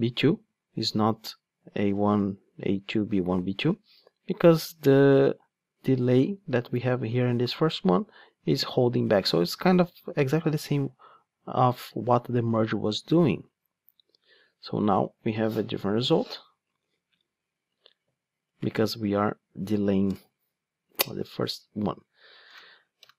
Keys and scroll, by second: 16.8 super+x, 18.7 super+v, 21.0 super+x.